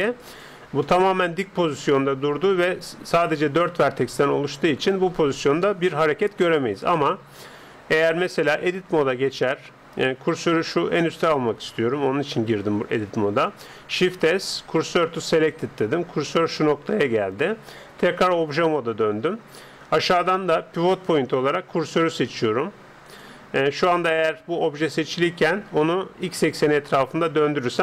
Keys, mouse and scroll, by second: 0.4-2.0 drag, 0.9-2.8 middle drag, 4.9-8.7 middle drag, 8.7 Tab, 9.1-11.8 middle drag, 13.9 shift+s, 18.1 Tab, 20.4-22.1 drag, 24.1-25.9 middle drag, 25.9 r.